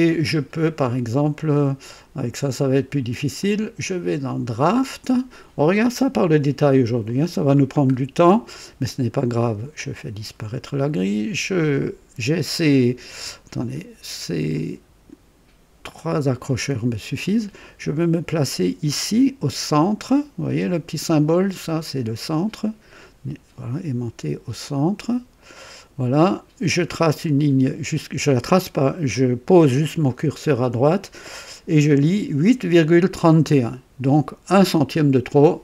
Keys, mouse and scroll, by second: 0.0 KP_3, 3.3 click, 4.4 click, 7.0 click, 7.9 scroll up 1, 9.7 click, 13.5 click, 14.5 click, 15.9 click, 25.3 click.